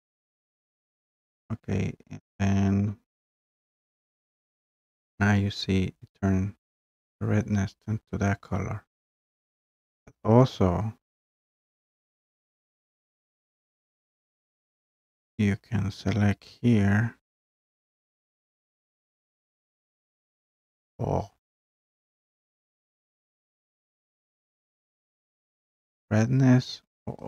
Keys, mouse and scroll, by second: 4.2-5.1 scroll up 3, 6.2-6.6 scroll down 1, 8.2 scroll, 8.8-9.2 scroll, 13.5 middle click, 19.9-25.2 drag, 25.3-27.2 drag.